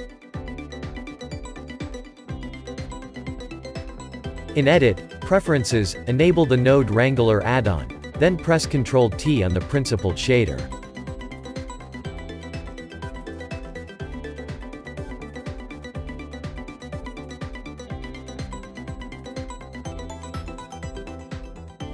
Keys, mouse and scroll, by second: 17.9 ctrl+t.